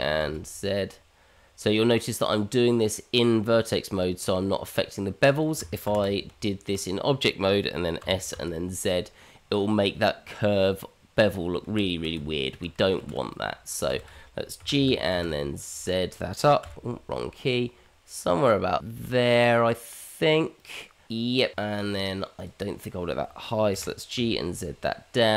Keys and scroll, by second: 5.8 ctrl+z, 6.4 Tab, 8.0 s, 11.6 ctrl+z, 12.1 Tab, 13.0 shift+z, 14.0 shift+z, 14.6 g, 21.9 Tab, 23.7 g.